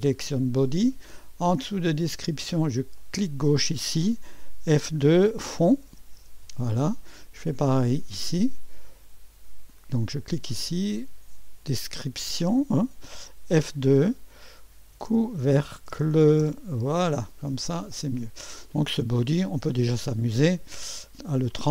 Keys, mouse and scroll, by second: 2.9 click, 4.6 F2, 5.2-6.6 typing, 8.3-9.8 drag, 10.1-13.2 drag, 13.5 F2, 14.5-16.7 typing, 19.7 click, 21.3-21.7 drag.